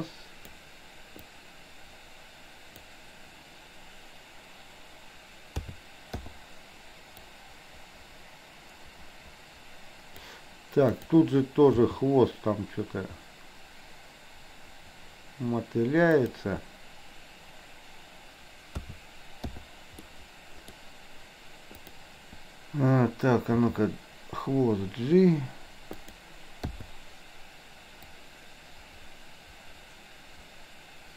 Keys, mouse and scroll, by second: 1.3 click, 1.9-3.0 drag, 5.6 a, 6.3 i, 7.4-10.4 drag, 10.9 click, 11.9 g, 18.9 a, 19.5 i, 20.1-20.9 middle drag, 21.8 click, 23.6 g, 26.8 i, 28.3-31.1 drag.